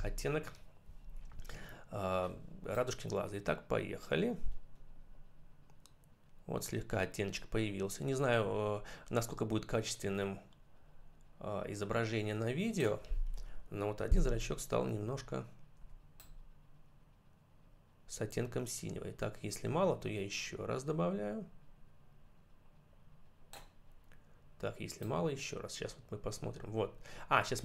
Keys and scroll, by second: 13.9 ].